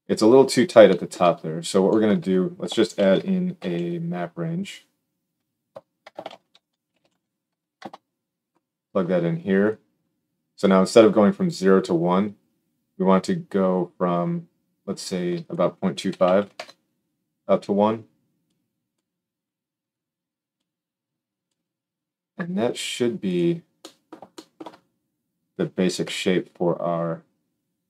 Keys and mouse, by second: 2.9 shift+a, 6.2 shift+a, 9.6-13.1 drag, 23.3-27.8 drag, 25.9 g.